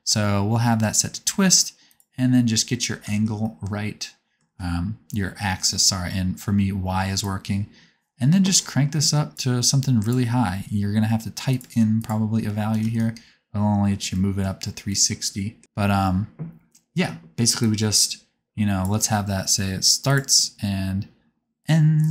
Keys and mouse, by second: 2.0-7.3 middle drag, 7.3 click, 18.6-20.2 drag, 20.4 click.